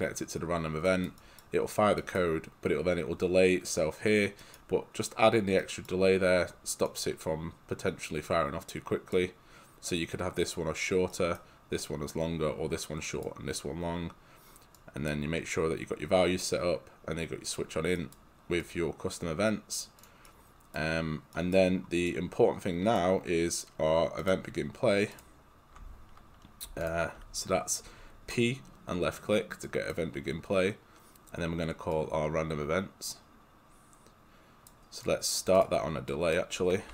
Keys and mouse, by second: 14.8 click, 18.0 right click, 18.7 click, 20.3 right click, 25.2 click, 26.7 p, 26.9 click, 29.7 click, 36.7-36.9 typing.